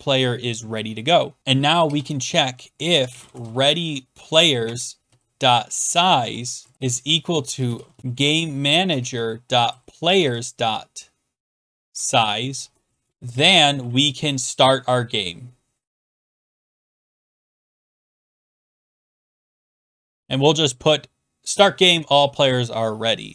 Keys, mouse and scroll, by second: 1.6-13.8 typing, 4.6 Tab, 15.5-19.9 typing, 21.3-22.0 typing, 21.5-23.3 drag.